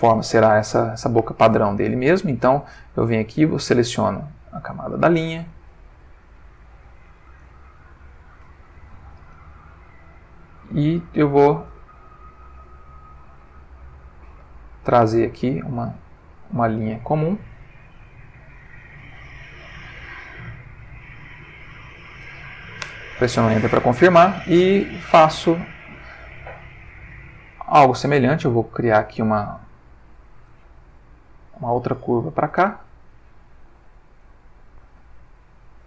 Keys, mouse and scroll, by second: 0.7 click, 3.0 click, 4.0 click, 7.5 click, 11.3 click, 12.5-14.6 drag, 15.2-17.6 drag, 18.1-19.4 drag, 20.0 click, 21.5 click, 22.8 Return, 27.0-28.7 drag, 29.3 click, 31.5 click, 32.5 Return.